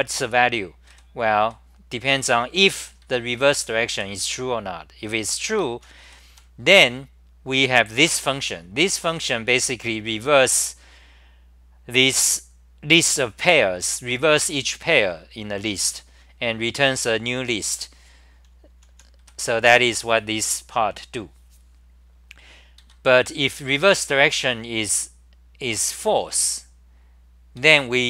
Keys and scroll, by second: 0.9 m, 1.4 1, 3.1-4.4 typing, 5.5 ctrl+g, 5.8-6.9 typing, 18.1-19.7 typing, 22.8 ctrl+g, 22.9-24.2 typing, 27.6 ctrl+g, 27.6-28.0 typing.